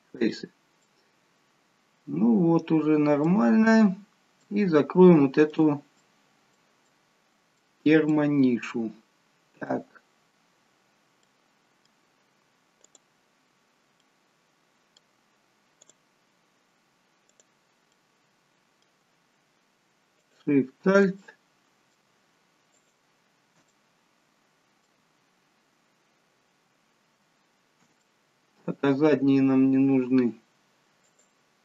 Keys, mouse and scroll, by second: 0.8 middle click, 3.6-4.0 scroll up 6, 4.0-4.6 scroll down 2, 4.4 shift+middle click, 6.0 middle click, 6.9 middle click, 8.1 middle click, 11.3 middle click, 12.8 click, 14.0 middle click, 15.9 click, 16.3-17.2 scroll down 1, 17.2 scroll down 1, 17.4 click, 17.9 middle click, 20.2 alt+shift+click, 21.2 middle click, 22.7 alt+shift+click, 23.7 middle click, 28.1 middle click, 31.1 alt+shift+click.